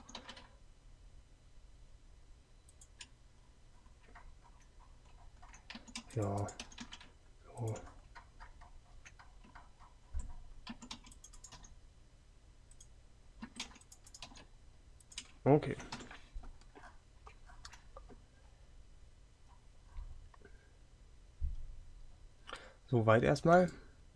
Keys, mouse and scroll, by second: 0.1 g, 5.8 a, 6.1 c, 10.8 a, 11.1 c, 13.6 a, 16.0 KP_3.